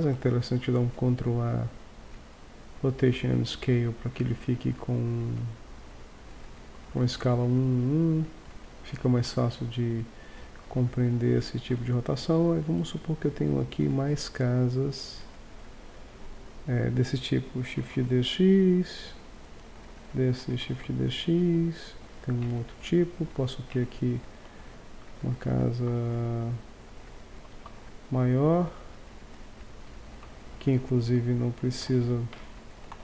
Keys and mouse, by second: 0.1 ctrl+a, 4.5-7.4 drag, 7.6-8.4 drag, 9.7-10.6 middle drag, 11.7 KP_1, 12.8-14.6 drag, 16.0 click, 17.8 shift+d, 19.2-19.7 drag, 20.7 shift+d, 22.5 Tab, 23.8 Tab, 24.5 s, 27.5 s, 29.0 click, 30.2 Tab, 31.8 ctrl+Tab, 32.9 z.